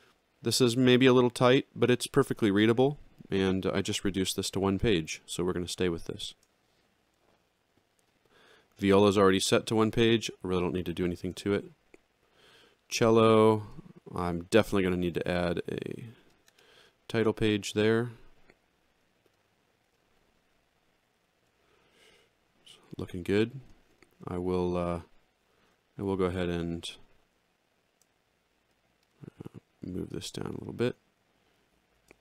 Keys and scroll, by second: 6.1 alt+shift+], 11.1 alt+shift+], 21.0 alt+x, 29.9 ctrl+alt+Down, 31.9 alt+shift+].